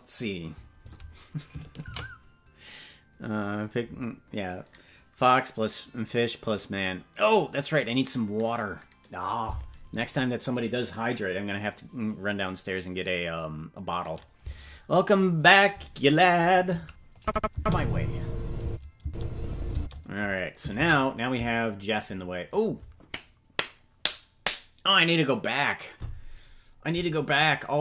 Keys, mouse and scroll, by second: 4.1 ctrl+s, 17.2 click, 17.5 space, 18.6 space, 19.0 space, 19.7 space, 23.1 ctrl+s.